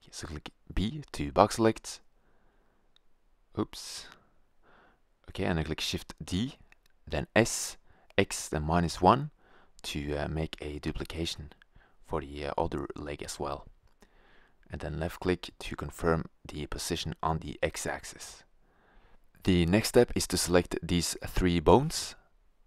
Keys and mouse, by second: 0.6 b, 3.7 b, 6.7 shift+d, 10.2 g, 16.7-18.5 drag, 19.3-22.6 right drag.